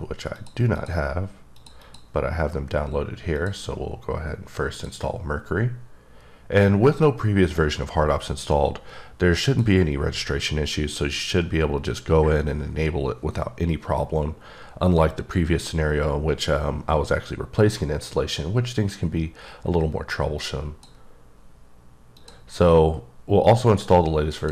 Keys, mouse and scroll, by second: 0.4 click, 0.7 click, 1.5 click, 1.8 double click, 3.4 click, 4.7 click, 9.4 click, 20.3 click, 22.2 click, 24.4 click.